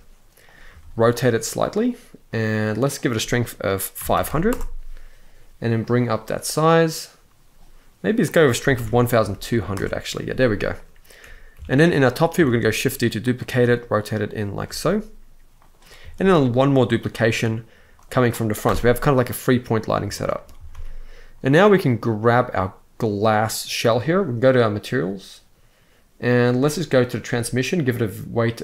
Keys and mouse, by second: 0.1 click, 0.3 r, 1.9 click, 2.6-4.2 drag, 3.9 0, 5.5 click, 7.9-9.4 drag, 9.1 0, 11.2 KP_7, 12.1 shift+d, 12.9 click, 13.2 r, 13.9 click, 14.3 r, 15.2 click, 15.8 shift+d, 16.6 click, 16.9 r, 17.6-18.3 drag, 18.3 KP_0, 19.8 shift+middle click, 20.2 ctrl+s, 20.4 ctrl+s, 22.0 click, 24.4 click, 27.5 click.